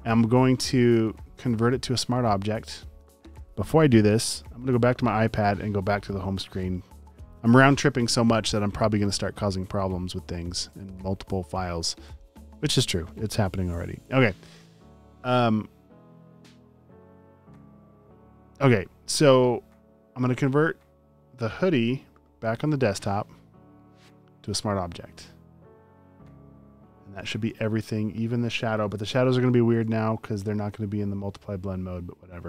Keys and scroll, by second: 27.4 space, 28.6 space, 28.8 space, 29.3 alt+super+space, 29.8 space, 29.9 space.